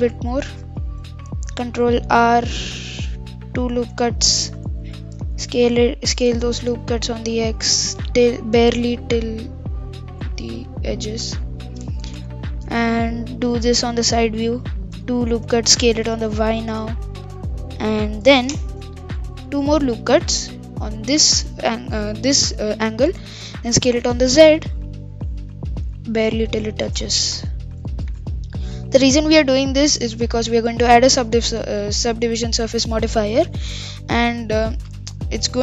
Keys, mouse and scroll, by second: 0.8-1.9 middle drag, 1.9 ctrl+r, 4.7 KP_1, 5.0-5.4 scroll up 3, 5.4 s, 10.4 middle click, 11.0-12.2 scroll up 1, 12.2 KP_3, 14.3 ctrl+r, 15.7 s, 19.2 ctrl+r, 23.2 s, 27.8-28.2 scroll down 4, 28.2 middle click, 28.7-29.0 scroll up 3, 29.0-35.6 middle drag.